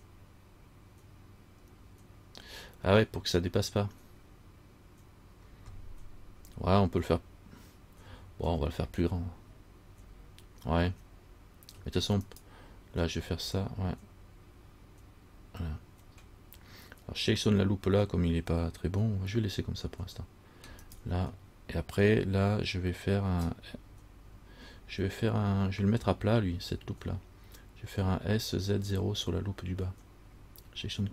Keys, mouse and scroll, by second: 8.3 a, 8.8 a, 12.5 alt+right click, 21.0 alt+right click.